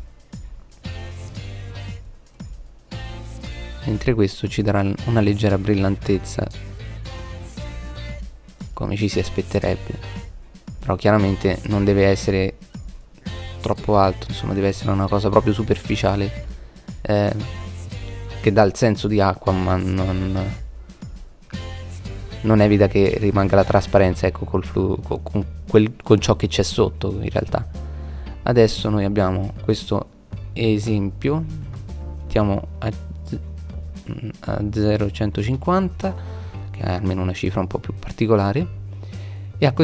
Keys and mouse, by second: 2.2 click, 12.7 middle click, 13.7-15.3 middle drag, 18.5 middle click, 37.7 middle click.